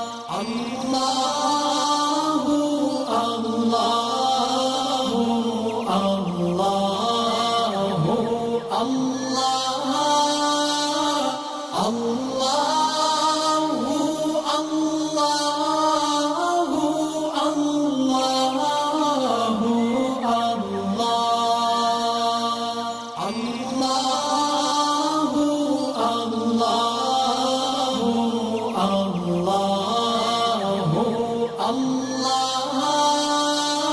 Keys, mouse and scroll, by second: 1.4 alt+Num_Lock, 1.4 click, 1.5 alt+scroll up 1, 2.3-4.3 alt+drag, 7.6 alt+scroll down 1, 7.8 space, 7.9 click, 9.1-9.6 alt+drag, 11.6-11.9 alt+scroll up 2, 11.9 space, 12.0-14.0 drag, 14.1-14.4 alt+scroll up 2, 14.4 space, 17.4-20.1 alt+drag, 19.9 alt+click, 21.1 alt+scroll down 1, 21.4 shift+click, 24.1 click, 24.7-25.2 alt+drag, 27.2 alt+scroll down 1, 27.5 click, 27.5 click, 29.0 alt+scroll up 1, 29.7-30.9 drag, 31.6-33.9 alt+drag.